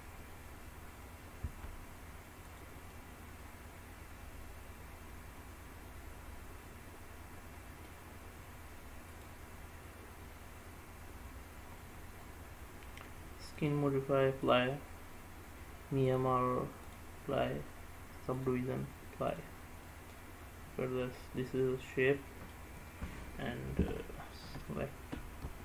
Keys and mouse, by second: 0.0-0.5 drag, 1.5 Tab, 2.6 click, 3.0-8.0 middle drag, 9.2-11.5 drag, 13.6-14.6 drag, 16.2-17.1 drag, 18.5-19.5 drag, 19.9-22.7 middle drag, 25.5 shift+a.